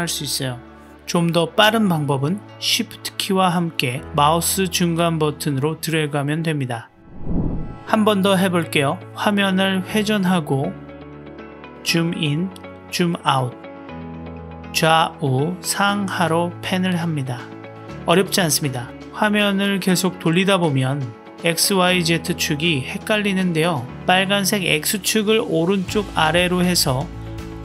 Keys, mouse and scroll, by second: 1.1-6.3 shift+middle drag, 8.7-11.1 drag, 11.4-13.7 drag, 14.6-17.1 drag, 23.1 click, 23.3-27.6 drag.